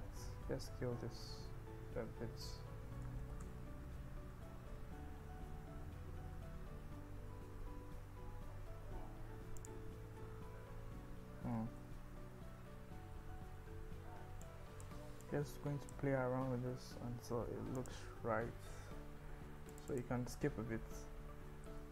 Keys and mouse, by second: 3.3 ctrl+shift+z, 5.8 a, 6.4 s, 7.6 shift+z, 9.6 click, 10.7 Tab, 11.3 Tab, 11.8-14.1 ctrl+z, 14.4 click, 15.3 click, 16.7 g, 17.0 z, 17.8 click, 20.0 click, 20.8 ctrl+b, 21.8 Escape.